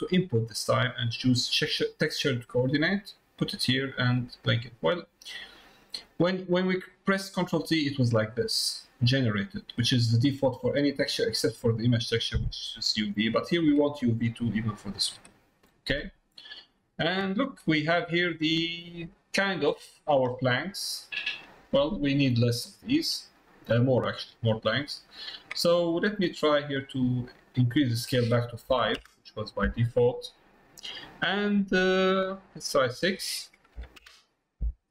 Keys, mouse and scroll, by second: 6.7-7.8 drag, 11.0 click, 12.4 click, 13.6 click, 17.5 middle click, 18.3 middle click, 20.3 middle click, 21.3 middle click, 22.3 middle click, 23.5 middle click, 24.0 middle click, 24.8 middle click, 27.7-34.9 drag.